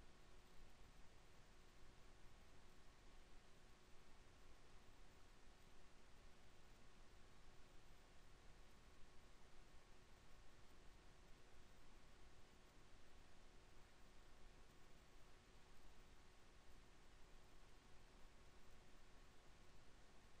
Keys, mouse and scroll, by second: 13.6 KP_5, 14.7 KP_1, 16.2 n, 18.1-20.4 drag.